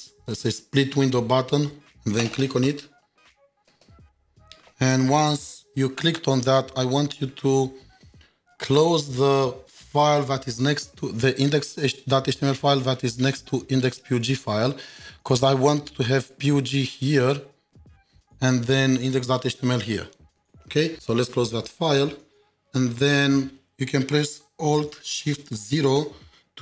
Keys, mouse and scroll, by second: 1.2 double click, 2.4 ctrl+shift+2, 7.3 ctrl+shift+4, 13.7 ctrl+shift+4, 14.0 double click, 17.8 double click, 20.5 ctrl+shift+4, 20.5 ctrl+shift+7, 20.8 ctrl+shift+2, 26.0 alt+shift+0.